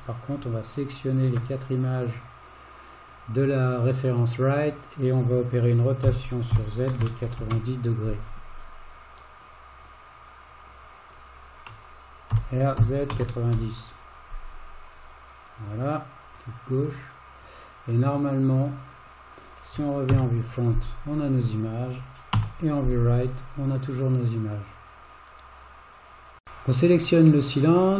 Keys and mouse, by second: 0.9 shift+click, 6.0 r, 6.6 z, 6.9 KP_9, 7.0 KP_0, 7.4 Return, 9.5-9.9 drag, 10.7-11.1 drag, 12.4 r, 17.4 click, 20.1 KP_1, 22.4 KP_3, 26.4 Tab, 27.7 click.